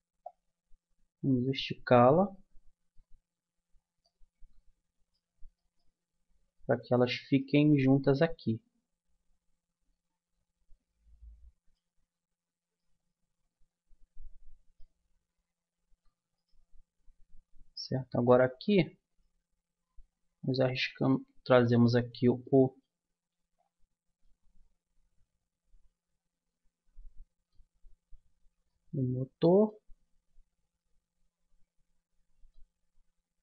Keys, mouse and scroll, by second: 0.2-2.1 drag, 2.9-8.5 middle drag, 10.4-12.7 middle drag, 12.1 Tab, 13.7 middle click, 14.1 middle click, 14.3 middle click, 16.3-17.8 drag, 17.8 middle click, 19.1 right click, 19.8-22.1 drag, 20.4 right click, 22.4 middle click, 24.0 middle click, 24.5-26.2 middle drag, 27.8-32.3 middle drag, 32.3 typing.